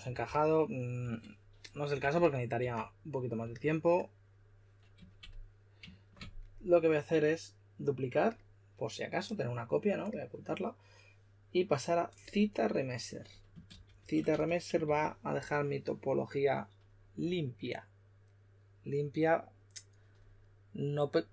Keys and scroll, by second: 0.0-3.0 typing, 13.4-14.8 typing.